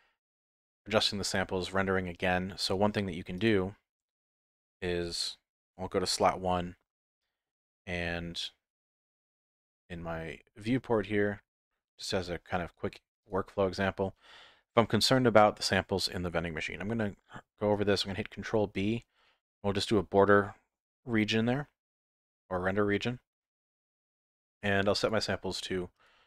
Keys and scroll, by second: 17.5 ctrl+b.